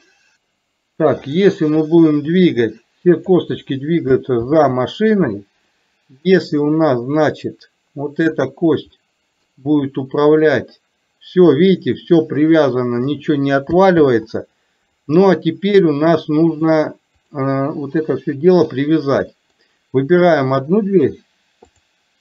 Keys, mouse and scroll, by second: 0.2-0.5 middle drag, 1.3 click, 2.4-3.4 drag, 5.8-6.3 middle drag, 8.4 click, 8.9 middle click, 10.4-13.2 drag, 14.2 ctrl+z, 16.5-17.4 drag, 18.2 middle click, 19.5 middle click, 20.4 click.